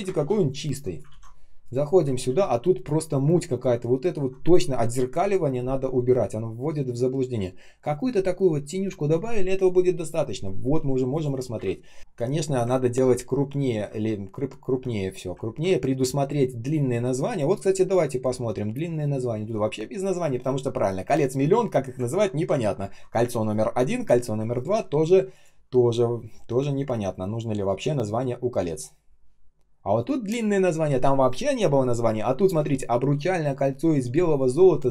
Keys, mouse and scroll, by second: 0.0 Print, 1.0 ctrl+c, 2.2 ctrl+м, 11.5 Delete, 12.0 ctrl+scroll up 1, 12.7 ctrl+scroll down 1, 14.6 ctrl+scroll down 1, 15.3 ctrl+scroll up 1, 22.0 ctrl+ц, 24.4 ctrl+click.